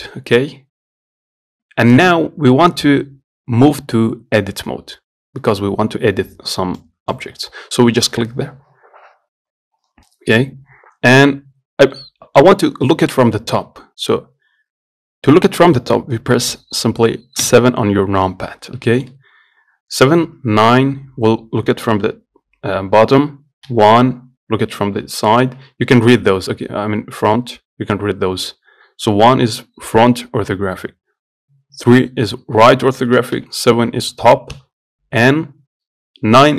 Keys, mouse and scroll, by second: 0.0-2.9 drag, 12.2-17.7 middle drag, 17.7 KP_7, 19.1-20.5 shift+middle drag, 20.5 KP_9, 23.9 KP_1, 29.7 KP_1, 33.6 KP_7, 34.8 KP_9.